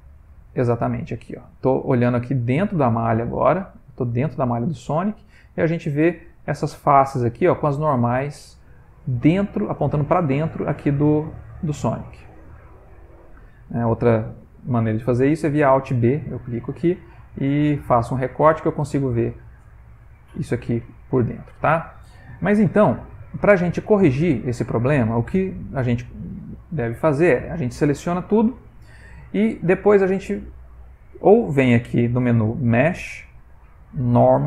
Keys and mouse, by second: 0.5 ctrl+middle click, 0.6 ctrl+middle click, 0.9 ctrl+middle click, 1.5 shift+middle click, 3.7 ctrl+middle click, 4.3 middle click, 4.8 middle click, 8.9 middle click, 9.2 middle click, 12.2 ctrl+middle click, 12.5 ctrl+middle click, 13.5 middle click, 15.2 alt+b, 17.0 middle click, 19.3 middle click, 19.5 middle click, 20.8 middle click, 22.7 alt+b, 23.1 middle click, 23.8 ctrl+middle click, 24.4 shift+middle click, 25.5 ctrl+middle click, 25.9 ctrl+middle click, 27.7 a, 28.2 middle click, 32.0 click.